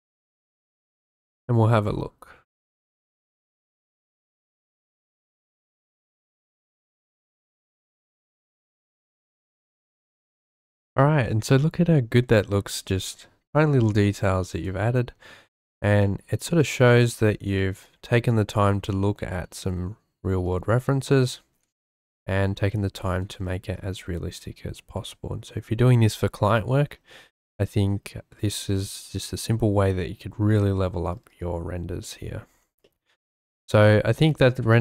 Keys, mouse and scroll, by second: 10.1 ctrl+shift+F2, 14.1 shift+click, 16.0 shift+middle click, 16.6 shift+middle click, 21.1 shift+middle click, 22.1 shift+middle click, 22.7 shift+middle click, 32.0 shift+click, 32.9 shift+drag.